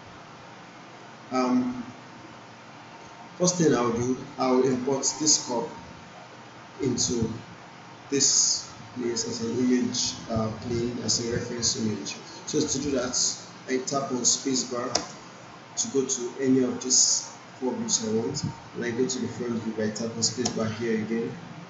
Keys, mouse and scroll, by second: 4.3-4.9 drag, 12.9 click, 14.9 space, 20.4 space.